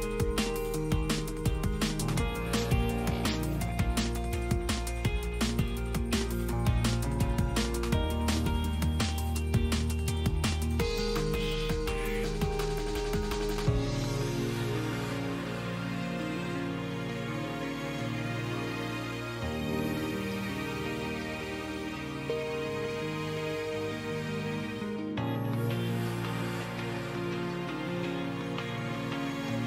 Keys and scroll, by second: 6.4 ctrl+z, 9.4 ctrl+z, 14.0 ctrl+z, 14.5 ctrl+z, 18.3 ctrl+z, 22.1 ctrl+z, 28.8 F3.